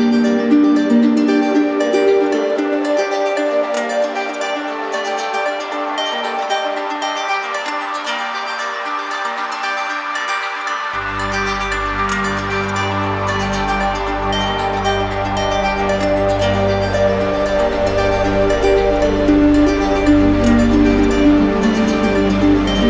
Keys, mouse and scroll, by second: 1.6 click, 2.6 click, 3.2 click, 3.8 click, 4.7 click, 5.1 shift+click, 6.3 click, 7.6 click, 12.4 click, 13.1 click, 15.0 q, 15.8 click, 15.9 right click, 17.2 z, 18.1 click, 19.7 click, 21.6 click.